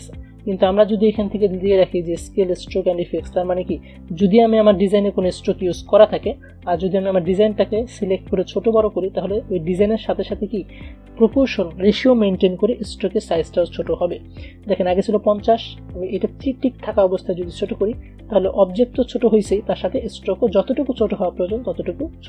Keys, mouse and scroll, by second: 0.1 ctrl+z, 3.4 click, 8.9-14.1 shift+drag, 14.1 ctrl+z, 17.7-22.0 shift+drag.